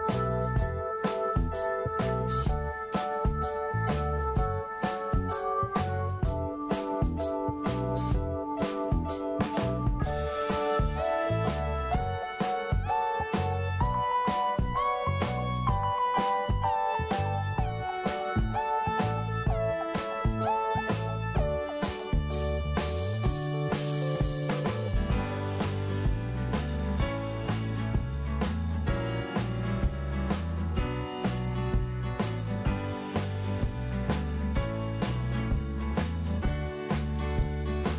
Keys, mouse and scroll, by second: 0.0 scroll up 1, 0.8 click, 1.4 middle click, 2.5 click, 5.1 middle click, 6.8 click, 7.6 middle click, 8.8-11.7 drag, 12.0 right click, 13.4 click, 16.4-16.8 scroll down 1, 18.1-21.8 drag, 21.9 scroll up 1, 22.9 click, 23.5 middle click, 24.6 scroll up 1, 25.9-28.7 middle drag, 29.3 scroll down 1.